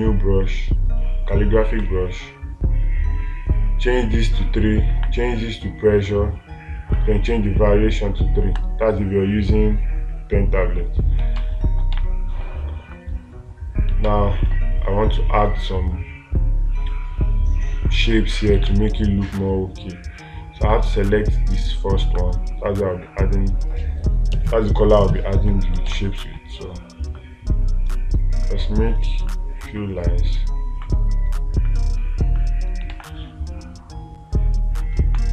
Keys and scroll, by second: 11.8 space, 14.5 space, 19.1 space, 26.3 space, 33.4 space.